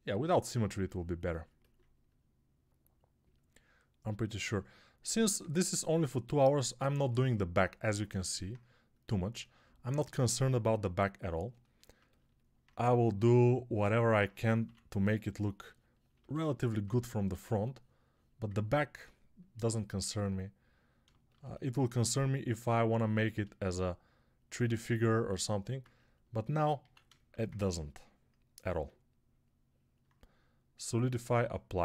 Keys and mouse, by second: 17.1 1, 26.7 alt+q.